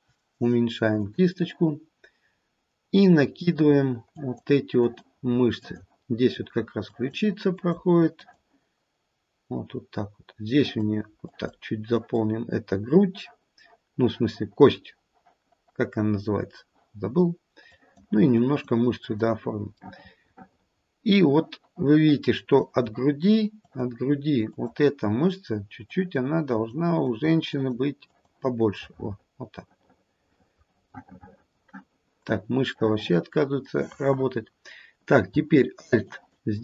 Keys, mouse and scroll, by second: 3.3 click, 4.1 click, 4.8 click, 5.5 click, 6.9 click, 7.6 click, 8.2 click, 10.6 click, 11.2 click, 11.9 click, 17.7 click, 18.4 click, 19.9 middle click, 20.2 middle click, 20.8 middle click, 22.6 click, 23.6 click, 24.5 click, 25.9 click, 26.5 click, 27.0 click, 27.4 click, 28.0 click, 28.8 middle click, 29.6 middle click, 31.4 middle click, 32.7 middle click, 32.9 middle click, 36.0 alt+click.